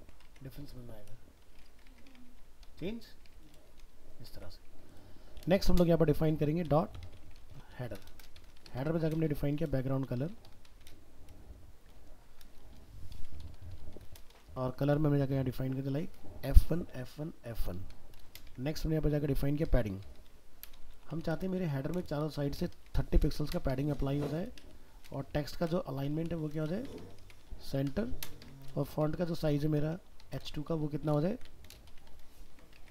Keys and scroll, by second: 0.0 ctrl+s, 0.3 alt+Tab, 2.4 ctrl+v, 3.3 alt+Tab, 32.5 ctrl+s, 32.8 alt+Tab.